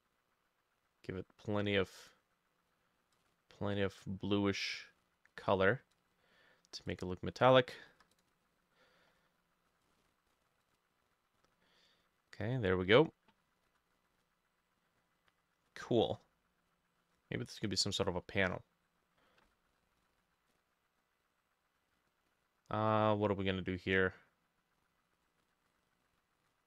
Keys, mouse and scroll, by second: 7.9 f, 13.7 ctrl+shift+a, 19.5 ctrl+z, 20.0 w, 25.4 ctrl+shift+a.